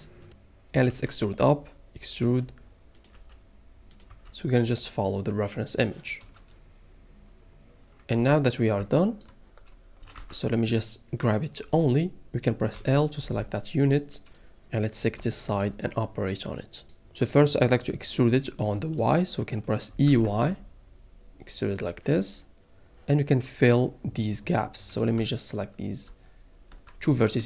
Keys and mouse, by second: 0.9 e, 2.0 click, 2.2 e, 3.0 click, 3.1 e, 3.9 click, 4.1 e, 5.7 click, 8.1 a, 8.8 shift+middle click, 10.2 a, 12.7 l, 14.3 middle click, 15.8 middle click, 19.9 e, 20.0 y, 21.7 click, 26.7 shift+middle click.